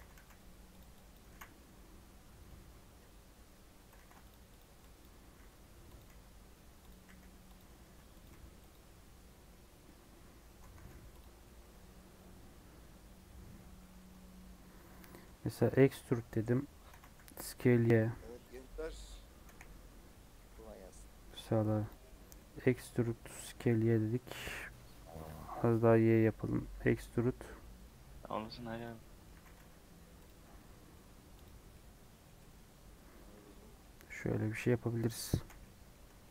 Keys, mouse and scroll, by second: 1.0 click, 1.2 g, 2.9 3, 3.9 ctrl+r, 4.6-8.2 typing, 4.9 click, 10.4 Tab, 10.7 alt+z, 11.1 click, 11.2 scroll down 4, 11.3-13.7 middle drag, 13.7 scroll up 1, 13.9 Tab, 14.1-15.5 middle drag, 15.5 e, 16.3 middle click, 16.9 s, 18.8 middle click, 19.4 KP_1, 20.3 e, 22.0-23.6 middle drag, 23.6 scroll up 1, 24.4 s, 26.3 middle click, 26.6 e, 28.9 middle click, 29.3 s, 30.4 middle click, 31.0 Tab, 31.7-34.0 middle drag, 34.0 scroll down 1, 34.1 middle click, 34.4 scroll up 1, 34.5 Tab, 35.4 /, 35.6 middle click, 35.9 scroll up 1, 36.1 Tab, 36.2 middle click.